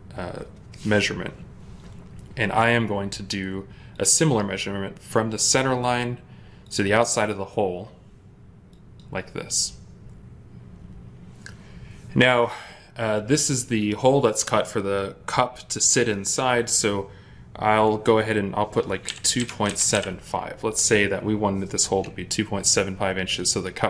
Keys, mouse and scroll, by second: 18.9-19.8 typing.